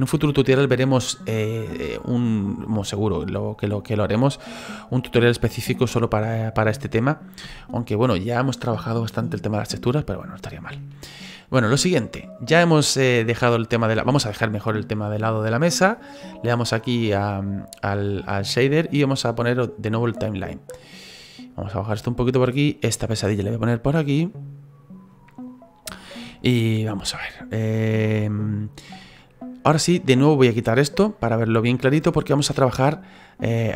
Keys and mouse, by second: 26.3 shift+middle click, 27.8 middle click, 28.3 shift+middle click, 30.8 click, 31.6 shift+middle click, 32.1 middle click.